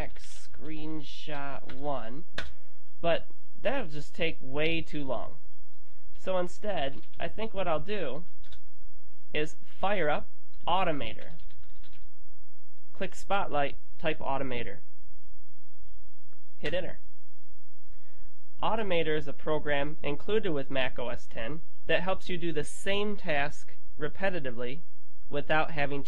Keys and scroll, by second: 0.0-1.7 typing, 6.7-8.2 typing, 10.9-12.4 typing.